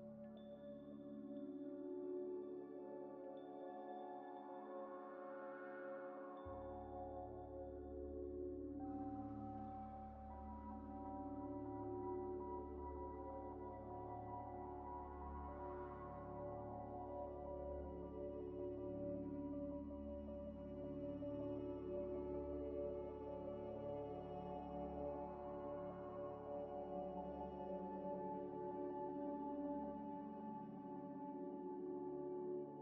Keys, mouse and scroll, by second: 1.6 double click, 2.3 b, 2.6 o, 2.6 o, 3.0 Return, 4.6 double click, 7.5 z, 7.8 middle click, 8.1 Tab, 8.5 scroll up 1, 8.6 scroll down 1, 8.8 scroll up 1, 9.0 Tab, 10.9 scroll down 1, 13.5 middle click, 15.5 scroll down 1, 16.6 middle click, 17.9 g, 18.0 z, 18.8 scroll down 1, 19.1 scroll up 1, 19.5 z, 20.7 g, 20.7 z, 22.4 scroll up 1, 22.7 z, 23.0 scroll up 1, 24.2 scroll up 1, 24.3 shift+click, 25.3 g, 25.9 s, 26.2 x, 27.7 Tab, 28.1 Tab, 28.4 Tab, 28.6 2, 29.3 ctrl+z, 30.8 scroll down 1, 32.2 double click.